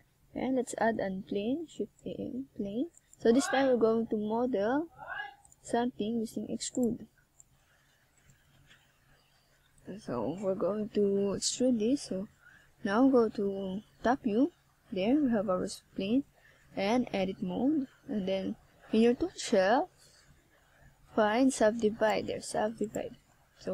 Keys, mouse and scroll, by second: 1.3 shift+click, 1.9 shift+click, 2.2 shift+click, 2.7 shift+click, 3.8 KP_1, 6.3 s, 8.7 click, 9.5 click, 11.1 s, 12.9 click, 13.1 middle click, 14.1 scroll up 1, 15.1 scroll up 2, 18.4 right click, 19.1 right click, 19.6 Tab, 20.1 right click, 20.7 shift+right click, 20.8 shift+right click, 22.5 shift+s.